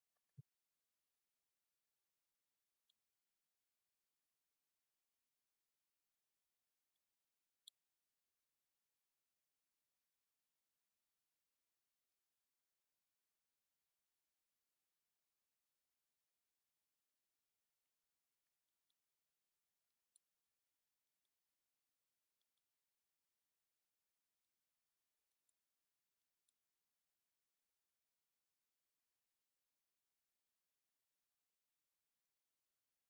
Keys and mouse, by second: 1.0 KP_0, 2.5 shift+middle drag, 5.2 click, 6.8-7.5 middle drag, 11.9-18.2 shift+drag, 18.5 middle drag, 19.7 middle drag, 20.9 middle click, 22.2 middle drag, 24.3 middle drag, 25.1 middle click, 26.0 middle click, 32.2-32.6 middle drag, 32.9 middle drag.